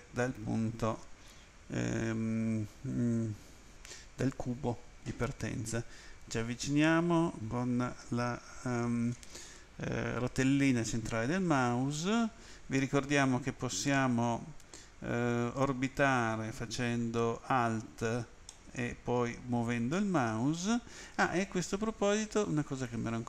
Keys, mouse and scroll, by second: 5.5-7.0 scroll up 4, 11.1-11.5 scroll up 1, 11.5-12.4 scroll down 1, 18.5 middle click, 22.7 click.